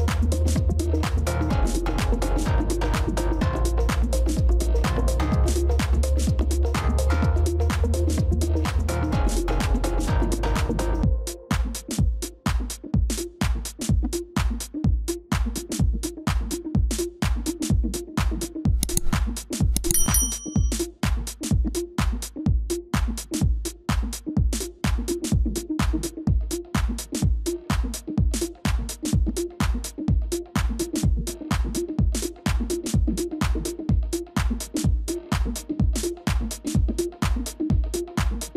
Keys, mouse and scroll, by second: 14.3 right click, 17.2 v, 21.5 right click, 26.6 Delete, 29.6 Delete, 33.7 Delete, 36.3 Delete, 36.7-37.4 scroll down 1, 38.1 Delete.